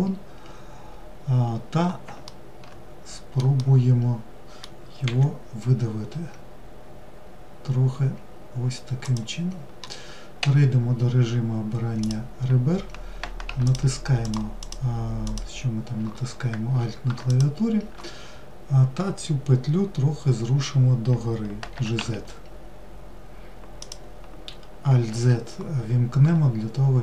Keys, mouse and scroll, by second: 1.1-1.8 scroll down 2, 1.8 alt+middle click, 3.2-4.7 middle drag, 4.7 e, 11.6 click, 13.2 alt+click, 13.8 alt+click, 14.2 alt+click, 14.8 alt+click, 16.9 shift+click.